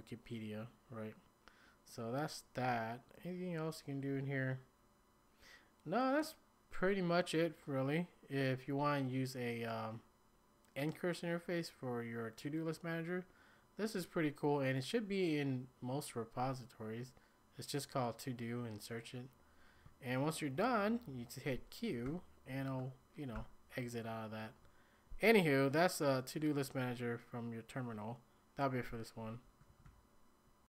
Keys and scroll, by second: 22.0 q, 23.3 ctrl+l, 29.5 ctrl+a, 29.8-30.7 typing.